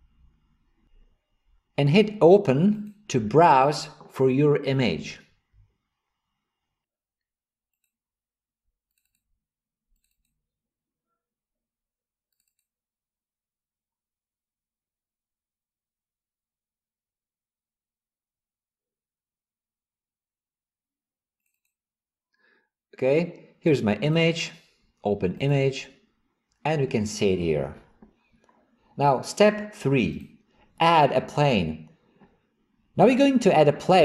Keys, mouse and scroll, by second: 2.8 click.